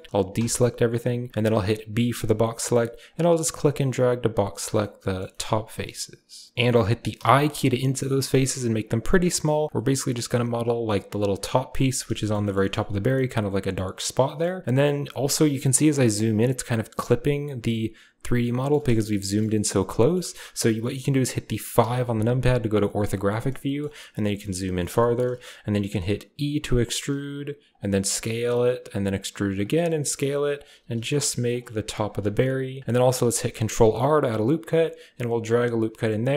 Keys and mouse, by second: 0.2 a, 1.8 b, 4.6 click, 5.2 shift+click, 7.0 i, 9.9 middle click, 12.1 shift+middle click, 12.3 click, 12.5 shift+click, 13.5 click, 14.1 click, 15.5-17.6 ctrl+drag, 17.6 ctrl+middle click, 18.8 shift+middle click, 19.0 middle click, 19.4 ctrl+middle click, 21.6 KP_5, 23.5 shift+middle click, 24.1 shift+click, 24.7 middle click, 24.8 shift+middle click, 26.2 e, 27.7 s, 28.8 e, 30.6 g, 31.1 s, 31.5 e, 32.8 g, 33.2 ctrl+r.